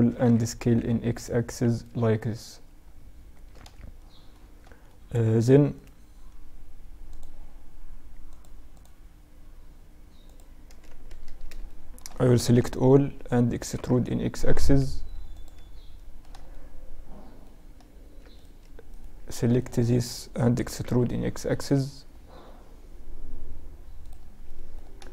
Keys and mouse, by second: 3.1-4.9 middle drag, 4.9-6.3 right drag, 10.0 a, 10.2 a, 10.8-12.8 middle drag, 11.8 KP_Subtract, 12.8 e, 15.1-17.5 middle drag, 17.5-20.4 right drag, 19.7 e, 23.6-25.1 middle drag.